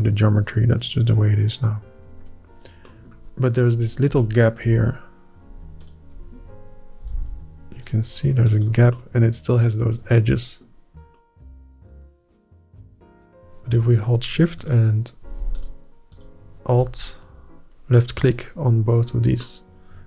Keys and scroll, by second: 8.0 g.